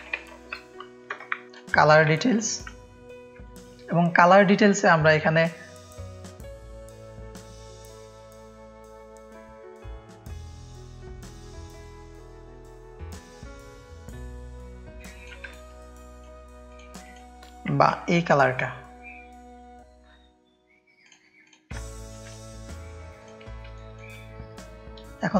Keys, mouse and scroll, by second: 0.0-2.0 typing, 1.1 ctrl+Return, 1.4 click, 2.2 click, 2.5 drag, 3.4 click, 3.4 space, 4.4 shift+click, 5.8 drag, 6.4 click, 6.4 space, 6.6 click, 7.1 alt+shift+click, 8.4-9.4 drag, 10.1 click, 11.1 ctrl+z, 12.7 click, 13.8 click, 14.9 ctrl+space, 14.9 click, 15.5 click, 15.5 space, 17.0 click, 18.0 i, 21.4 click, 21.7 ctrl+space, 21.8 ctrl+click, 23.7 click, 23.7 space, 25.1 click.